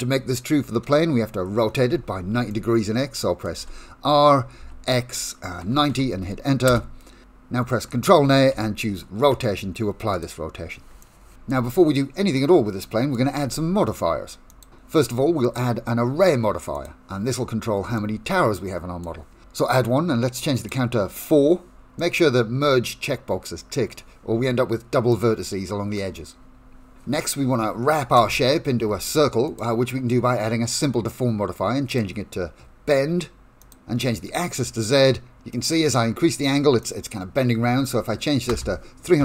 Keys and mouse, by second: 2.5 middle click, 3.6 r, 8.5 ctrl+a, 11.0 shift+middle click, 12.4 middle click, 14.5 click, 15.4-16.8 drag, 17.9-19.0 shift+middle drag, 20.7 click, 21.1 click, 22.0-23.9 middle drag, 25.1 click, 28.1 click, 29.6-31.9 drag, 33.6 click, 35.5 click, 37.0-39.2 drag.